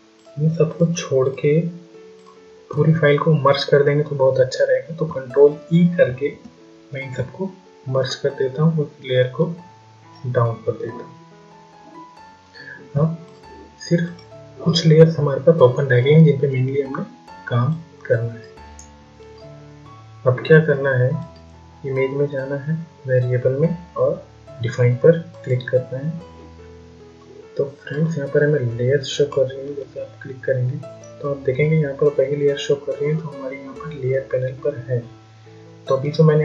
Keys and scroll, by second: 5.5 ctrl+e.